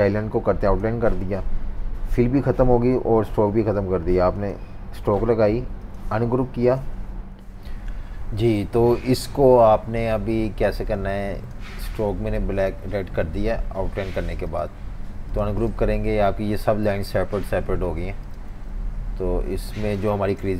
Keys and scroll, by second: 7.3 F18.